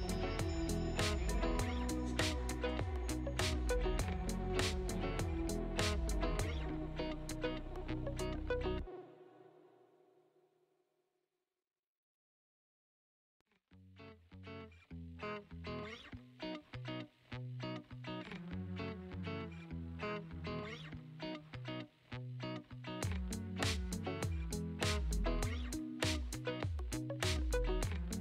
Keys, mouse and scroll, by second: 0.5 middle click, 1.3 click, 2.4 ctrl+t, 3.1-3.9 scroll down 1, 3.9-5.3 drag, 6.2 middle click, 7.2 KP_1, 7.9-9.4 shift+middle drag, 10.5-22.3 drag, 22.5-23.5 drag, 23.6 shift+middle click, 24.2 shift+a, 28.1-28.2 drag.